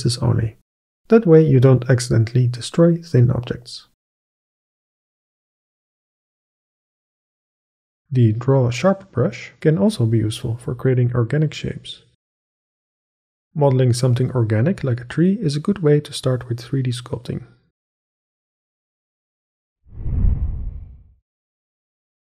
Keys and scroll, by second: 14.8 [.